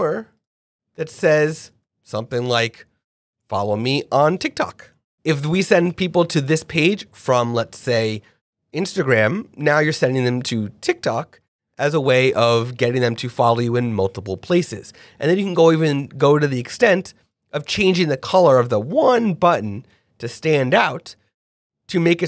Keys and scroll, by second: 5.0 shift+f.